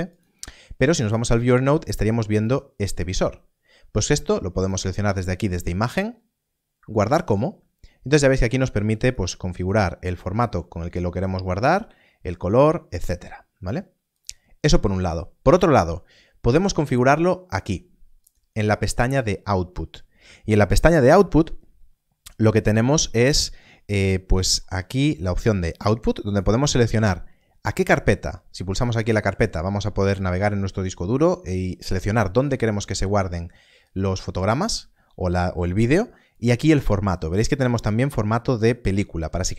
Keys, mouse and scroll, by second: 0.0 click, 4.6 click, 7.2 click, 14.1 click, 18.1 click, 24.0 click, 28.9 click, 33.8 click, 36.3 click.